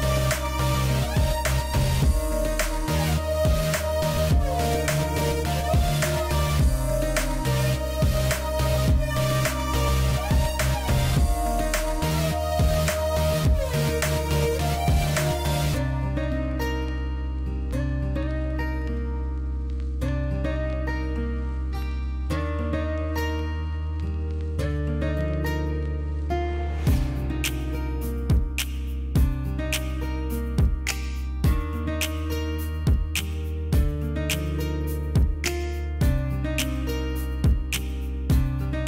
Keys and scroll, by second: 0.2 space, 1.6 space, 4.0 space, 4.4 space, 5.6 space, 15.0 space, 15.5 space, 21.0 space, 22.2 space, 23.6 space, 25.0 ctrl+alt+z, 26.3 space, 28.3 space, 28.9 space, 31.4 space, 32.3 alt+space, 32.9 ctrl+space, 36.4 space.